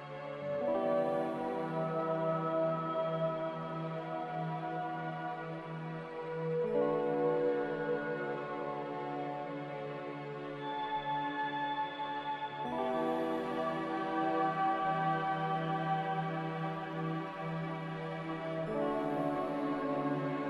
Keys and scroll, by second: 9.4-10.2 typing, 14.3 ctrl+z, 18.1-19.0 typing.